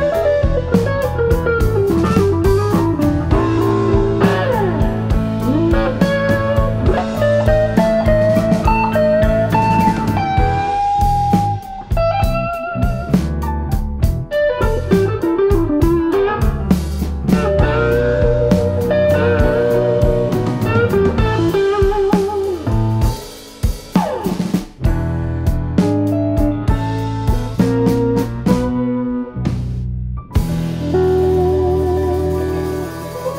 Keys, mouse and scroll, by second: 0.0 middle click, 1.7 shift+d, 2.6 click, 3.4 click, 5.4 shift+d, 6.1 click, 6.9 click, 7.3 middle click, 8.1 click, 8.8 click, 10.1 click, 11.7 shift+d, 12.2 click, 12.7 middle click, 13.4 click, 13.9 click, 13.9-14.6 scroll down 2, 14.2 KP_1, 14.6 click, 17.8 middle click, 18.2 click, 18.4 click, 18.9 shift+d, 19.4 click, 19.9 click, 20.3 click, 20.7 click, 20.8 middle click, 21.2 click, 21.6 click, 22.9 click, 23.2 click, 23.4 middle click, 23.6 click, 24.0 shift+d, 24.4 click, 24.9 click.